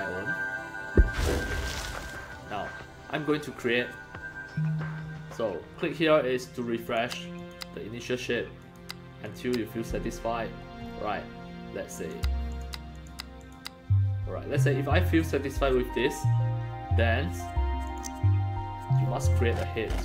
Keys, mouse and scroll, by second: 6.9 click, 7.4 click, 8.6 click, 9.3 click, 10.8 scroll up 2, 12.0 click, 12.5 click, 13.0 click, 13.4 click, 15.6 scroll up 1, 17.8 click, 19.0-20.0 scroll up 8.